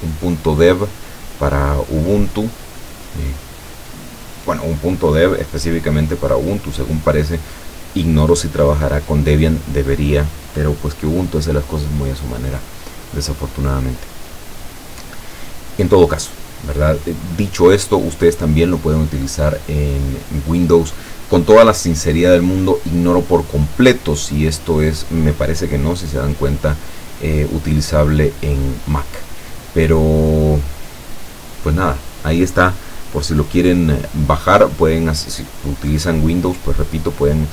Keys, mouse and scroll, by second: 2.0-2.5 scroll down 2, 3.1-3.9 scroll down 3, 4.0-4.7 scroll up 3, 13.5 click, 14.3 click, 16.5-18.1 scroll up 4, 18.7-19.0 scroll down 2, 19.7 scroll down 2, 20.2 scroll up 2, 22.2-22.5 scroll up 2, 23.5-28.7 drag, 33.7-34.5 scroll down 4.